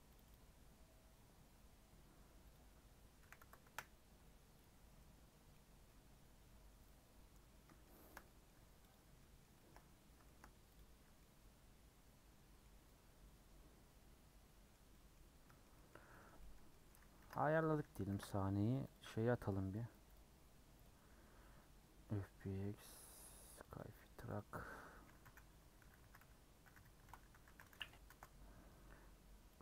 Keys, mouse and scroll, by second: 0.8-1.5 scroll up 4, 3.6-4.9 drag, 4.9 scroll up 1, 5.3 scroll down 2, 5.5 middle click, 6.1-7.0 scroll up 1, 7.0 scroll up 1, 7.2-7.6 scroll down 4, 7.6-8.9 middle drag, 8.9 click, 9.1 scroll up 1, 9.1 middle click, 9.8-10.1 scroll up 1, 10.2-14.8 shift+middle drag, 14.8 scroll down 1, 14.9 middle click, 15.2 scroll up 1, 15.4-17.7 middle drag, 17.7 a, 21.0-29.6 drag.